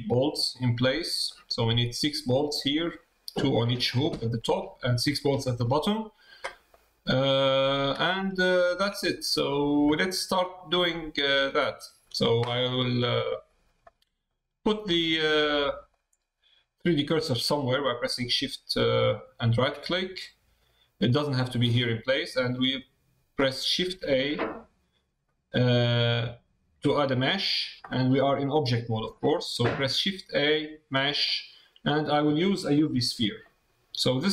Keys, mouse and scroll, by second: 1.2 middle click, 4.1 shift+middle click, 4.6 middle click, 6.7 middle click, 7.6 middle click, 8.4 shift+middle click, 9.4 middle click, 9.9 shift+middle click, 10.6 shift+middle click, 11.2 shift+middle click, 11.8 shift+middle click, 13.4 shift+middle click, 15.6 middle click, 19.2 shift+right click, 19.8 middle click, 20.6 middle click, 21.8 middle click, 34.0 middle click.